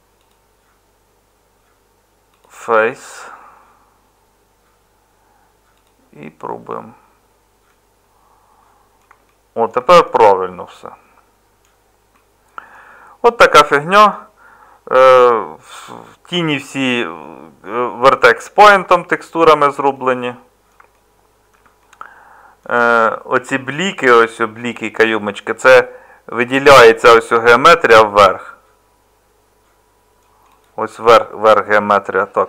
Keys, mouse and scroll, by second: 30.9 Tab.